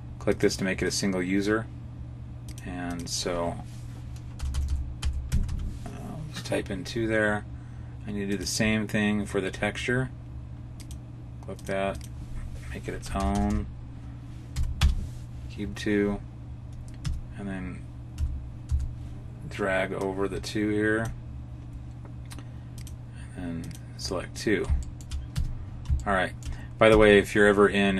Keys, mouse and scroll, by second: 0.2 click, 2.4 click, 4.4 BackSpace, 4.5 BackSpace, 8.2 click, 10.7 click, 11.5 click, 13.1 BackSpace, 13.3 BackSpace, 16.9 Tab, 18.0 a, 18.6 a, 22.7 click, 24.7 shift+middle click, 25.3 Tab, 25.6-25.9 scroll down 2, 25.9 shift+middle click, 26.8 Tab, 27.3-27.7 scroll up 2.